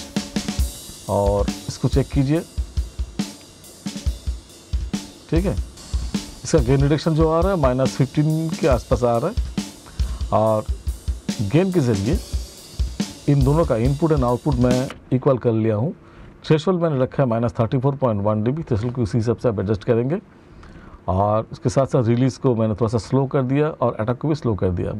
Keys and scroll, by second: 14.3 space.